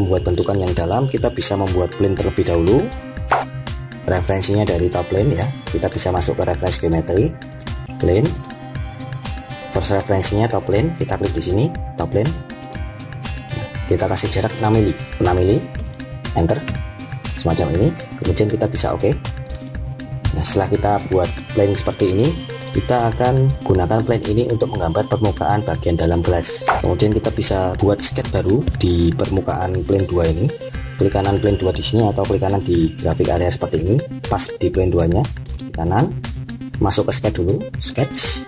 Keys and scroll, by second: 16.2 Return.